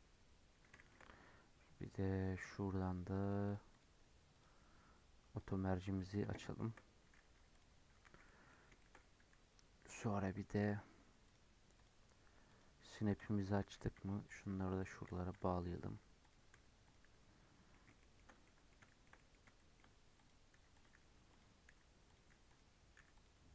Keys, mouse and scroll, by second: 0.3-0.6 scroll up 5, 0.7-2.7 shift+middle drag, 2.7 click, 4.0-5.4 drag, 6.0-6.4 scroll down 3, 6.4 shift+middle click, 6.9-7.5 scroll up 2, 7.5 click, 7.8 scroll down 6, 8.1 alt+z, 8.2 middle click, 8.5 scroll up 3, 8.7-11.2 shift+middle drag, 11.2-12.5 drag, 12.9 click, 13.7 g, 14.7 click, 15.0 g, 16.2 click, 16.5 g, 17.7-18.7 middle drag, 18.7 scroll down 1, 18.8 shift+middle click, 19.4 shift+scroll up 1, 19.5 shift+middle click, 20.1 click, 20.5 g, 21.3 click, 21.7 g, 22.4 click, 22.9 g.